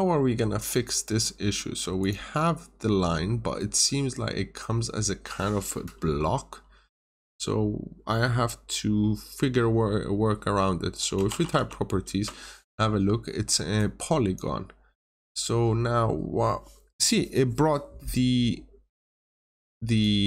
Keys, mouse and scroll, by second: 0.1-0.5 scroll down 1, 0.5 scroll up 1, 1.9 click, 10.9-11.9 typing, 12.0 Return, 13.7 click, 15.1 scroll down 1, 18.8 click.